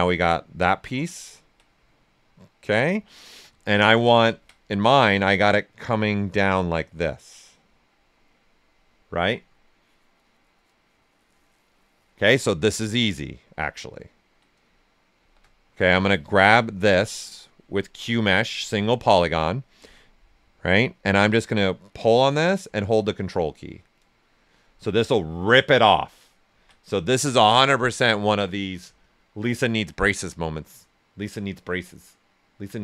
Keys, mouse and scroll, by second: 1.6 right click, 12.5 right click, 13.7-15.1 ctrl+right drag, 15.1 shift+f, 16.8 space, 18.0 space, 21.5-26.4 drag, 26.4 ctrl+z.